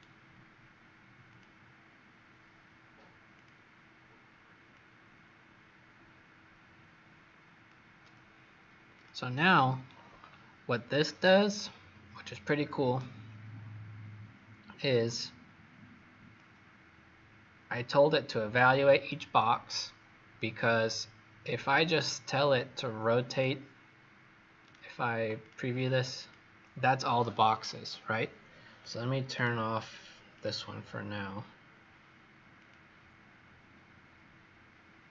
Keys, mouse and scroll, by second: 1.2 click, 9.9 scroll down 2, 11.0-11.5 scroll down 1, 11.7-14.5 scroll up 2, 14.5-16.3 scroll down 1, 16.3 click, 21.7 scroll down 2, 22.6-23.2 scroll up 4, 23.2 click, 24.5 right click, 25.3 click, 29.2 right click, 30.6 click.